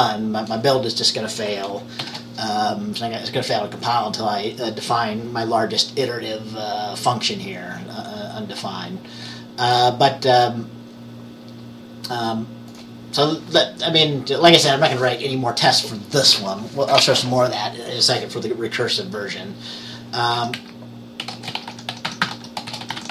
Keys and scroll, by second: 2.1 ctrl+b, 20.4-23.1 typing.